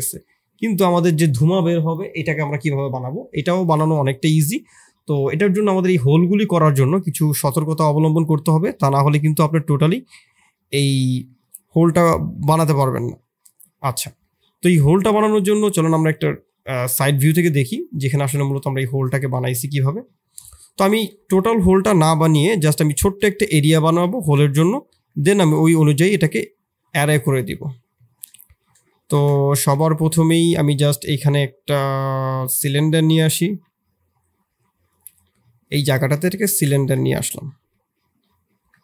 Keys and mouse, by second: 21.8 middle drag, 22.6 KP_6, 23.2 KP_3, 24.0 shift+middle click, 24.5 middle click, 25.1 shift+middle click, 25.9 KP_7, 27.1 KP_3, 27.9 shift+click, 28.2 middle click, 28.8 shift+click, 29.4 ctrl+KP_1, 30.2 shift+click, 30.8 shift+a, 33.4 g, 35.1 s, 35.9 click, 36.7 shift+click, 37.5 KP_4, 38.5 KP_7.